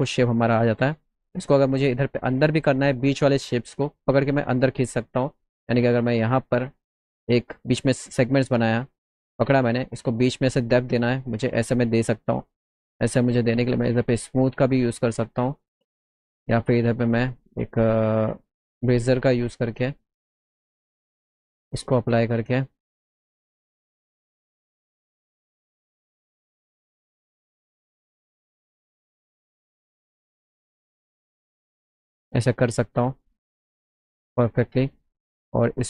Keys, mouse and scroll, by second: 0.3 alt+middle click, 2.7 middle click, 3.1 middle click, 3.4 alt+middle click, 5.6 right click, 6.5 click, 7.7 click, 8.0 click, 8.5 click, 9.4-11.9 drag, 12.4 click, 13.7 click, 14.7-15.8 drag, 15.6 ctrl+right click, 15.8 ctrl+z, 16.3 click, 16.3 right click, 18.7 click, 21.0 click, 24.6 click, 25.8 ctrl+z, 27.3-28.6 drag, 29.4 click, 30.4 ctrl+z, 31.1 click, 33.7-34.7 drag, 35.7 click.